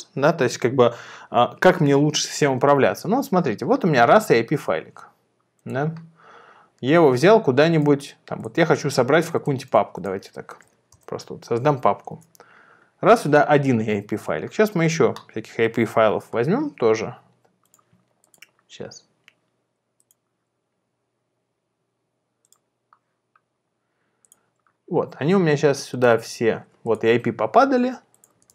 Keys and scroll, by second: 4.2 super+c, 10.7 Return, 12.1 super+v, 28.4 super+c.